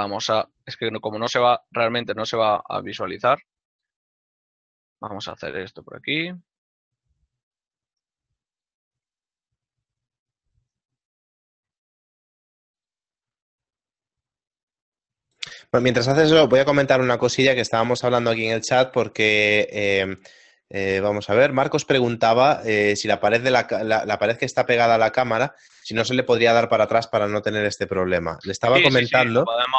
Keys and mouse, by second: 2.9 click, 3.0 z, 4.8 click, 5.7 right click, 8.1 shift+right click, 10.1 ctrl+middle click, 11.2 shift+right click, 12.0 ctrl+z, 12.1 shift+right click, 15.1 click, 20.1 ctrl+middle click, 27.2 ctrl+middle click.